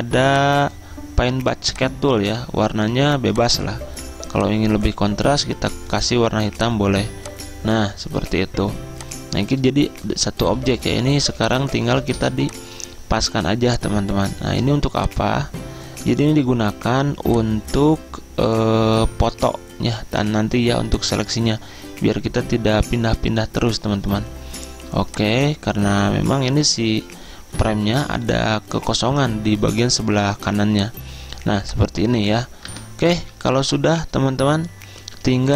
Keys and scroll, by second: 10.7 ctrl+d, 11.3 z, 16.3-17.0 typing, 27.7-28.8 Right, 31.2 z, 32.8 Return.